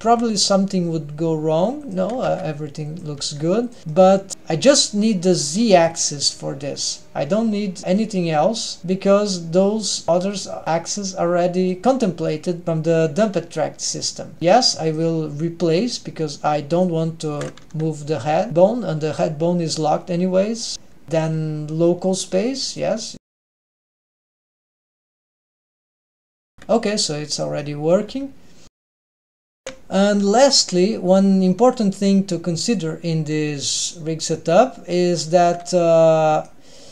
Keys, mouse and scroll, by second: 0.8 r, 3.8 g, 4.2 middle click, 10.6 click, 12.3 drag, 15.0 click, 17.5 click, 18.3 n, 21.8-23.0 drag, 21.8 n, 23.4-24.2 drag, 25.4 click, 25.7 r, 26.9 g, 27.9-28.3 middle drag, 29.5 middle drag, 29.5 g, 29.6 ctrl+alt+shift+super+r, 31.9 right click, 33.9-35.0 right drag, 36.5-36.9 shift+middle drag.